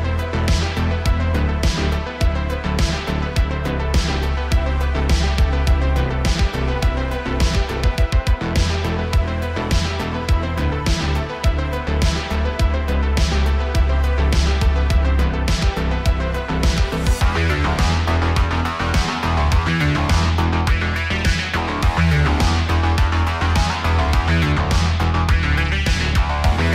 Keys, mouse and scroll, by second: 2.2-3.6 shift+middle drag, 3.6-4.3 drag, 4.3-4.9 middle drag, 4.9 scroll down 3, 5.2 shift+middle drag, 5.4 scroll up 1, 5.4-6.2 middle drag, 6.2 scroll up 1, 7.0 click, 8.2-8.7 drag, 8.7-9.5 shift+middle drag, 9.5 shift+a, 10.3 s, 12.4 middle click, 12.8-17.0 drag, 17.0 scroll down 4, 17.1-17.5 middle drag, 17.5 click, 18.5 ctrl+shift+t, 20.4 click, 20.8 middle click, 21.1-21.6 scroll up 3, 21.6-24.3 drag, 24.3 middle click, 24.7-25.4 scroll up 2, 25.4-26.2 middle drag, 26.3 scroll up 1.